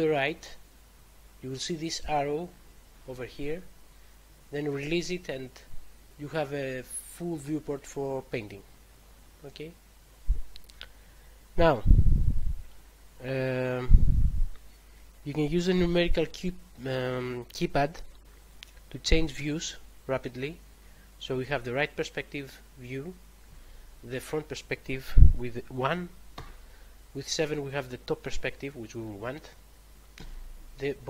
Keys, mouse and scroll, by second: 19.3 3, 23.4 1, 26.2 7, 30.1 9.